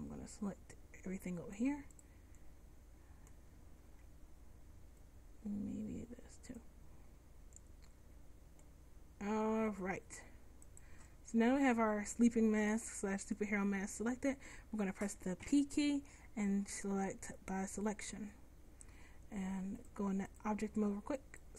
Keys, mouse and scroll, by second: 2.1 middle click, 2.8 click, 3.3 middle click, 4.1 c, 15.5 p, 21.3 click.